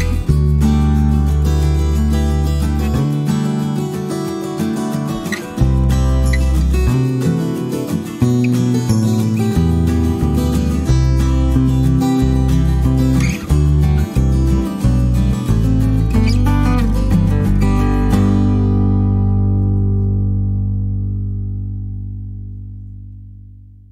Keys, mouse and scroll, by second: 0.2 click, 1.2 click, 2.0 click, 2.4 click, 2.8 click, 5.8 click, 8.0 click, 8.5-9.0 scroll up 1, 9.4 click, 9.7 right click, 10.6 click, 11.4-12.7 drag, 12.7-13.2 scroll down 4, 15.5-16.7 drag, 16.9 click, 17.8 click, 18.8-20.8 drag, 21.7-23.9 drag.